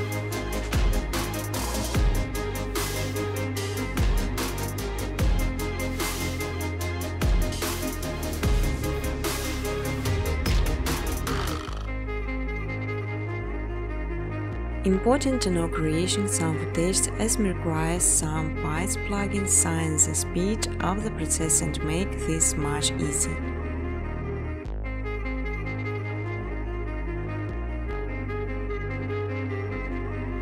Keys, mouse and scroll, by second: 2.3 click, 3.9 click, 4.0-4.8 typing, 5.1 click, 6.2 click, 6.5 space, 7.9-10.1 typing, 8.5 middle click, 9.5 middle click, 11.1 click, 11.9 space, 13.6-17.3 typing, 20.4-24.3 typing, 25.6 click, 25.9 click, 26.2 right click, 27.5 click, 28.6 click, 29.2-30.4 typing.